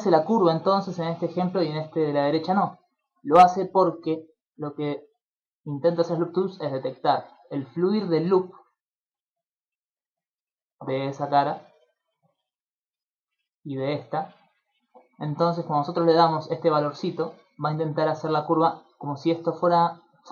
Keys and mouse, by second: 5.2-14.7 typing, 5.5 click, 6.4 click, 6.9 click, 7.4 click, 8.0 click, 8.6 click, 9.1 click, 9.5 click, 10.3 click, 11.7 click, 12.0 click, 12.2 click, 12.5 click, 12.7 click, 12.9 click, 13.3 click, 14.1 click, 16.0 click, 17.2-18.1 d, 18.1 click, 18.5 d, 18.7-19.7 d.